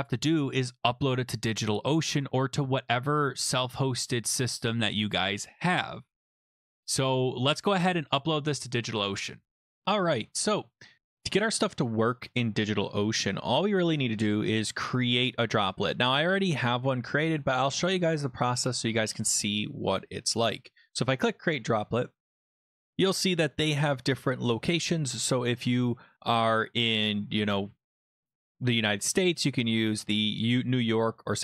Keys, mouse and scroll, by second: 0.4 click, 7.4-9.4 drag, 21.1 click.